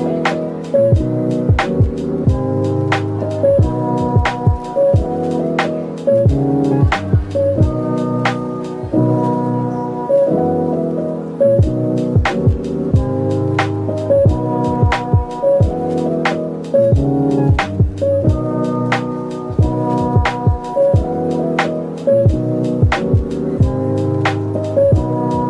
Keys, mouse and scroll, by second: 8.5 z, 12.3-12.8 scroll up 1, 13.6-13.9 scroll down 1, 16.7 /, 18.1 middle click, 18.8 z, 19.8-20.5 scroll down 1, 20.5 Tab, 21.3 z.